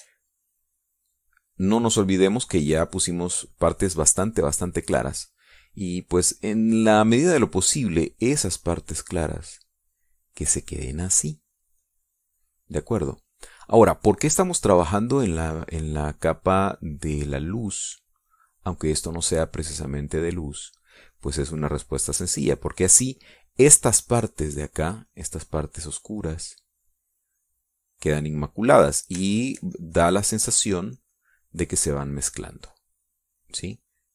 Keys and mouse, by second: 3.0 shift+click, 3.7 shift+click, 5.0 click, 8.6-10.9 drag, 11.0-13.1 drag, 16.3-18.2 drag, 20.8-21.8 drag, 23.1 middle click, 25.8-30.6 drag.